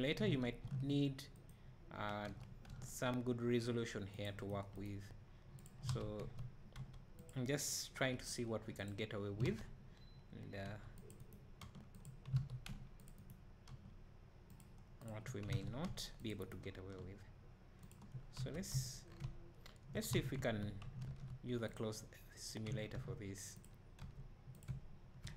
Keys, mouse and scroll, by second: 0.4 ctrl+r, 2.2 2, 4.1 c, 4.7 right click, 5.9 alt+a, 5.9-7.7 right drag, 6.2 1, 7.1 c, 8.1 g, 9.4 alt+a, 10.9 c, 11.3 right click, 11.7 g, 12.4 alt+a, 13.0 c, 13.3 right click, 13.7 g, 14.6 click, 15.6 alt+a, 16.2 c, 16.5 right click, 16.8 g, 18.4 Tab, 19.1 scroll down 1, 19.3 `, 20.2 alt+a, 20.4 `, 23.7-25.0 right drag.